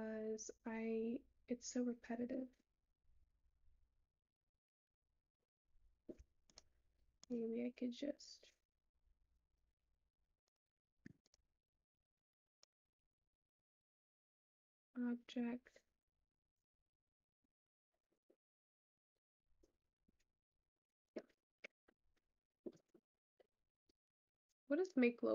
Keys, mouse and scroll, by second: 0.1-5.2 drag, 7.2-10.1 shift+drag, 12.6 shift+click.